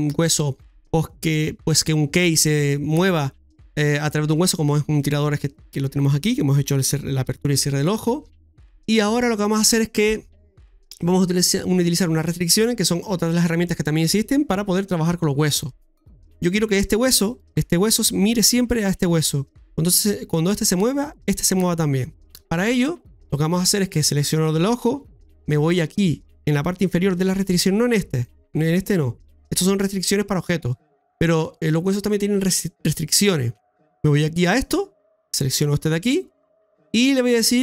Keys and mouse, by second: 4.9 middle click, 8.7 middle click, 17.2 right click, 28.1 click.